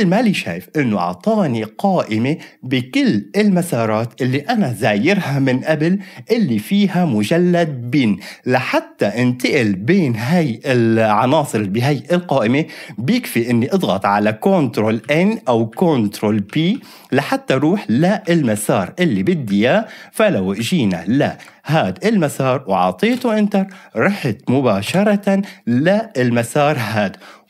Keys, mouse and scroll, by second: 15.0 ctrl+n, 15.5 ctrl+n, 15.7 ctrl+n, 16.2 ctrl+p, 16.5 ctrl+p, 16.7 ctrl+p, 17.5 ctrl+n, 18.0 ctrl+n, 18.2 ctrl+p, 19.5 ctrl+p, 19.5 ctrl+n, 20.6 ctrl+n, 21.2 ctrl+p, 23.1 Return, 24.8 Return.